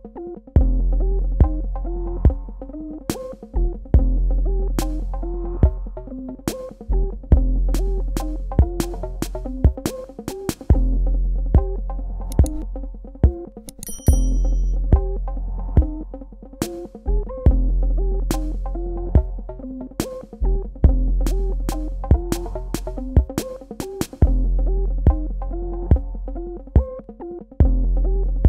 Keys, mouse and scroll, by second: 0.9 click, 15.1 click, 16.8 click, 19.4 click, 21.2 right click, 22.9 click.